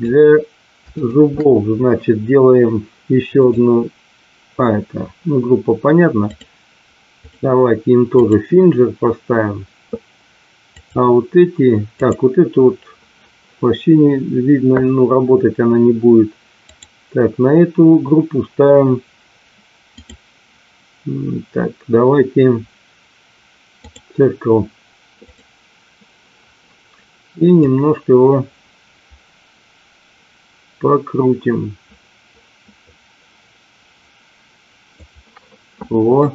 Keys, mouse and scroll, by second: 0.9 shift+click, 3.4 click, 6.2 click, 8.1 click, 11.9 click, 16.7 click, 19.9-24.0 drag, 25.1 click, 27.5-34.9 drag.